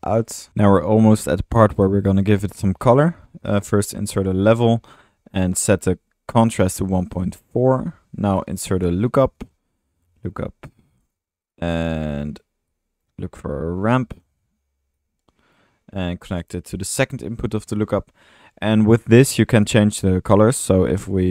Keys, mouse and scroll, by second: 0.0-0.8 typing, 0.2 click, 2.2-2.6 right drag, 3.0-4.4 typing, 8.4-8.7 right drag, 8.8 click, 9.1-10.3 typing, 11.2-11.5 drag, 13.1-14.6 typing.